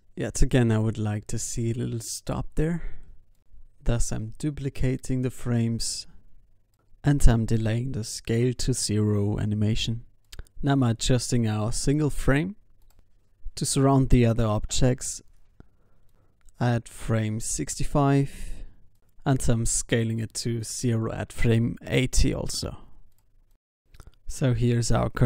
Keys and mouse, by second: 0.3 middle click, 1.6 shift+d, 2.9 g, 4.3 g, 6.3 alt+a, 8.2 alt+a, 8.4 ctrl+s, 9.4-10.7 drag, 13.0 s, 15.3-19.1 drag, 17.0 i, 20.3 s, 21.6 i, 22.5 alt+a, 23.3 ctrl+s, 24.7 ctrl+s.